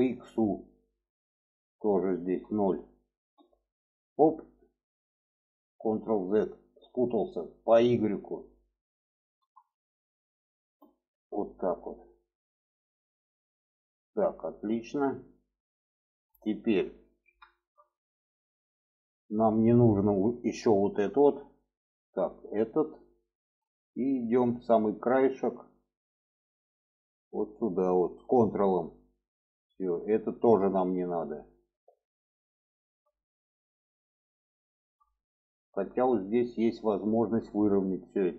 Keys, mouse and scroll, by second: 0.5-3.6 drag, 5.2 click, 5.6 ctrl+z, 8.0-11.0 drag, 12.5-14.6 middle drag, 16.3 shift+middle click, 16.8 alt+z, 17.3 shift+middle click, 18.7 middle click, 20.7 3, 21.7 click, 22.3 shift+middle click, 22.9 shift+middle click, 23.4 middle click, 23.9 shift+middle click, 25.1 shift+middle click, 26.1 shift+middle click, 28.1 ctrl+click, 29.2 middle click, 30.4-32.2 shift+middle drag, 32.5 shift+middle click, 33.4 shift+middle click, 34.4 shift+middle click, 35.4 shift+middle click, 36.0 shift+middle click, 36.7 shift+middle click.